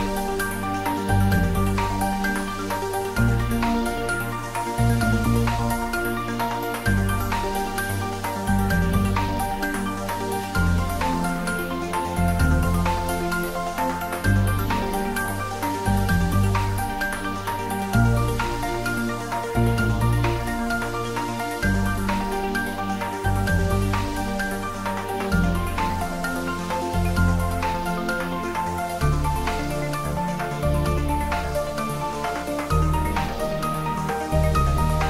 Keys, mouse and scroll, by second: 1.0 click, 1.3 g, 2.8 click, 3.1-4.0 typing, 4.4 click, 5.0 ctrl+s, 5.1 click, 5.6 ctrl+s, 5.9 shift+middle click, 6.7 ctrl+s, 13.7 click, 14.7 ctrl+s, 14.9 shift+middle click, 15.8 shift+middle click, 16.3-18.3 shift+middle drag, 18.3 shift+right click, 18.8 shift+a, 19.4 click, 20.0 s, 20.9 click, 21.4 middle click, 22.4 click, 22.8 ctrl+middle click, 23.2-24.2 typing, 24.2 middle click, 25.1 ctrl+middle click, 25.6 g, 26.8 click, 26.9-27.7 typing, 28.8 click, 29.3-32.6 typing, 30.8 click, 31.8 click.